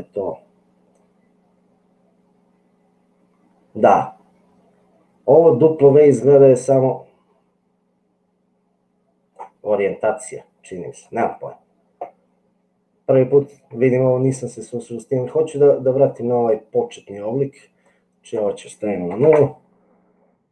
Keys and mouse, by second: 0.9-9.3 drag, 15.6 middle click, 17.9-19.8 drag.